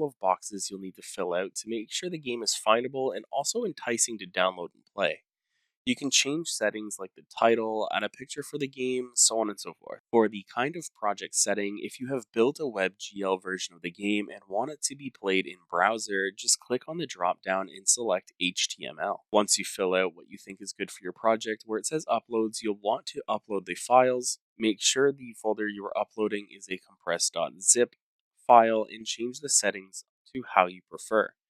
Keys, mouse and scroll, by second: 0.0-1.4 typing, 1.9 Tab, 5.5-6.8 typing, 8.5-11.8 typing, 10.3-11.3 scroll down 3, 11.3 scroll down 1, 11.3 click, 11.3 scroll, 14.0 click, 14.7 click, 17.1 click, 19.3 scroll, 21.9 scroll down 4, 22.4 click, 22.9 scroll, 24.0 click, 24.0 click, 30.7 click.